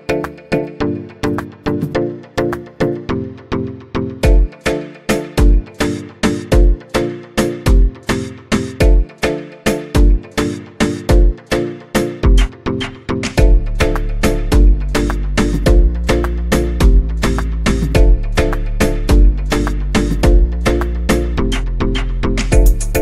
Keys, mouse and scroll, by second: 1.7 KP_1, 3.8 space, 4.3-6.5 scroll up 1, 6.5-7.4 scroll up 1, 7.8 click, 9.3-11.5 right drag, 11.5 click, 12.1 click, 14.5 click, 16.1-19.2 drag.